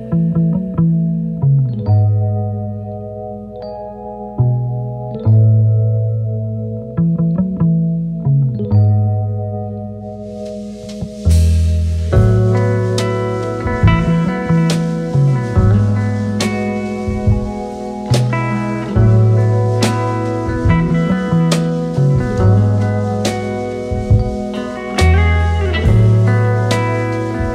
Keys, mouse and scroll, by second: 1.0 click, 3.2 j, 3.9 click, 15.0 click, 27.2 click.